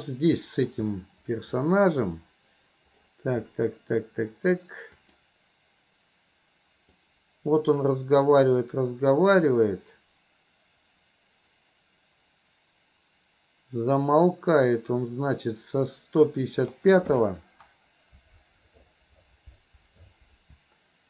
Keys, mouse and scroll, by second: 0.0 middle click, 5.0 click, 7.1-16.8 drag.